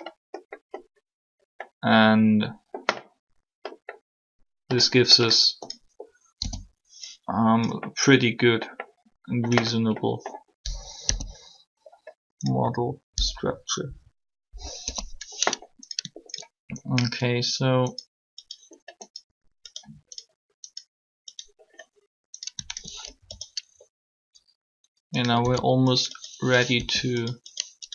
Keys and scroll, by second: 6.3 o, 10.9 1, 14.7 3, 25.4 s, 26.7 r.